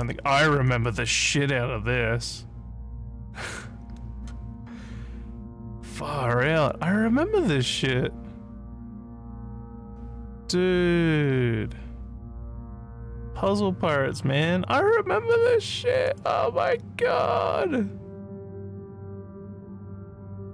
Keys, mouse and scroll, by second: 4.7 scroll down 1, 6.7 click, 12.3 scroll down 1, 13.1 middle click, 14.4 middle click, 16.1 click.